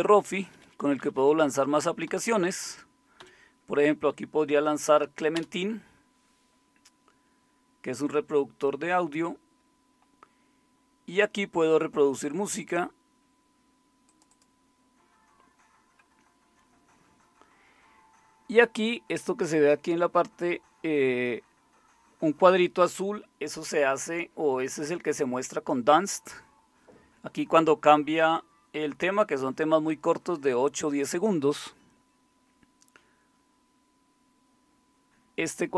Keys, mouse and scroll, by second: 5.3 Down, 5.3 Up, 5.3 Return, 5.3 …, 10.3-11.0 scroll down 1.